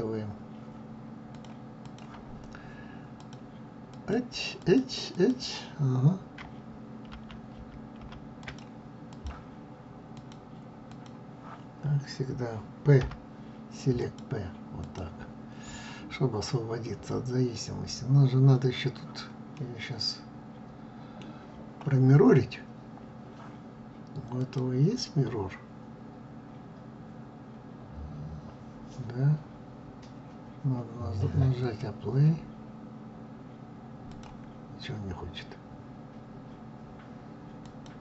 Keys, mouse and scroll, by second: 1.0-3.0 drag, 3.6 click, 4.2 click, 4.8 click, 6.9 ctrl+z, 7.2 ctrl+z, 8.1 ctrl+click, 8.8 click, 9.8-12.7 drag, 12.7 p, 14.5 click, 19.3-24.0 middle drag, 24.0 click, 31.3-34.3 drag, 37.3 click.